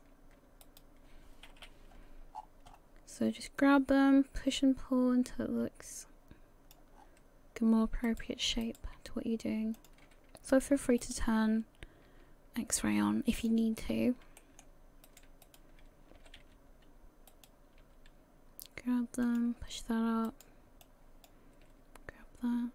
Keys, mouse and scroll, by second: 0.6 shift+right click, 1.5 KP_1, 2.3-3.6 scroll up 12, 3.6 click, 7.0-8.1 scroll down 6, 8.1 right click, 8.6 shift+right click, 9.8 click, 10.5 right click, 11.0 shift+right click, 12.1 g, 13.9 scroll up 1, 14.4 shift+middle click, 15.1 right click, 15.4 shift+right click, 16.2 g, 17.9 g, 20.3 right click, 20.8 click, 21.6 g.